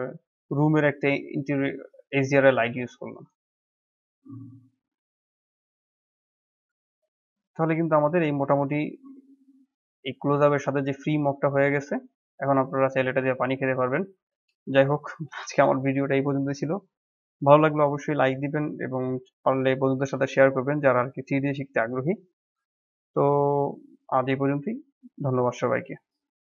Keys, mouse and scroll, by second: 2.8-3.3 scroll up 6, 3.6-5.8 middle drag, 5.8 scroll up 1, 6.1-6.9 middle drag, 6.9 scroll down 2, 7.1-7.9 middle drag, 7.9 scroll up 1, 8.2-10.3 middle drag, 10.3 scroll down 3, 10.5-12.8 middle drag, 12.8-13.1 scroll up 1, 13.1-14.2 middle drag, 14.2 scroll down 1, 14.5-14.8 middle drag, 14.8 scroll up 1, 15.0-16.5 shift+middle drag, 16.5 scroll up 1, 18.0-23.2 middle drag.